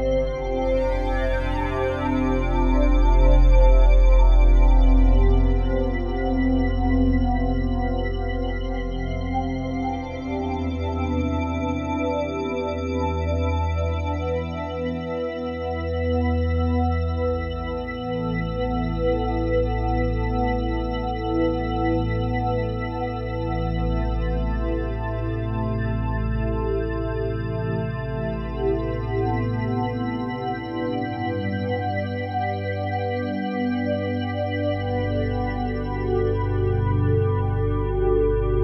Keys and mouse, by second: 0.1 typing, 0.2 click, 0.5 click, 1.1 alt+shift+drag, 1.7 ctrl+alt+drag, 2.2 alt+shift+click, 2.8 alt+click, 3.5 click, 4.0 click, 5.0-8.2 ctrl+alt+drag, 8.3-9.1 ctrl+alt+drag, 9.4-11.0 ctrl+alt+drag, 11.0 ctrl+s, 11.6-12.9 ctrl+alt+drag, 13.3-14.7 alt+shift+drag, 15.4-17.1 drag, 17.9 click, 19.2 Home, 20.2-21.3 ctrl+alt+drag, 21.8 click, 25.0 click, 25.7 click, 26.7-27.6 drag, 28.5 click, 30.1 click, 32.1 click, 34.5 click, 35.2 click, 35.7 click, 37.8 click, 38.5 click.